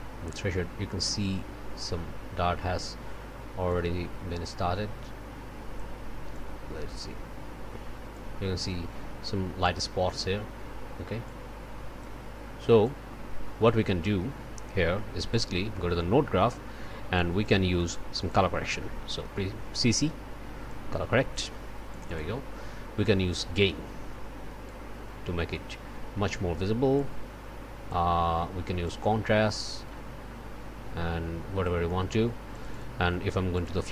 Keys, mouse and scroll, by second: 0.6 scroll down 2, 1.7-2.1 scroll down 2, 3.7-6.0 drag, 6.3-8.4 drag, 8.6-11.2 scroll up 2, 11.2-12.2 drag, 12.8-13.9 drag, 14.0 click, 14.4 middle click, 15.3 click, 15.7 click, 17.1 click, 17.7 click, 19.2 c, 21.9 click, 23.5-24.9 drag, 25.0 scroll down 2, 26.9-28.1 drag, 28.8-31.8 drag, 32.5 click, 33.5 click.